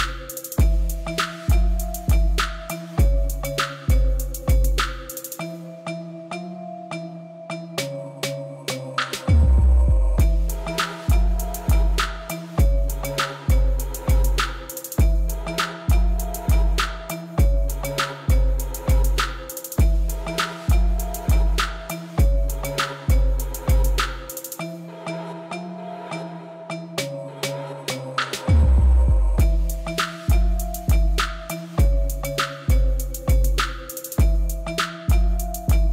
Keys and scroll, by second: 2.5 g, 3.0 y, 3.1 Return, 4.5 Tab, 8.0 Tab, 9.8 shift+d, 11.8-13.4 typing, 15.2 shift+z, 15.7 shift+z, 19.1 g, 20.3 y, 22.7 r, 22.8 y, 23.3 g, 24.1 Tab, 25.1 Tab, 27.0 ctrl+r, 28.1 s, 32.6 Tab, 33.2 Tab, 34.8 shift+d, 35.0 z.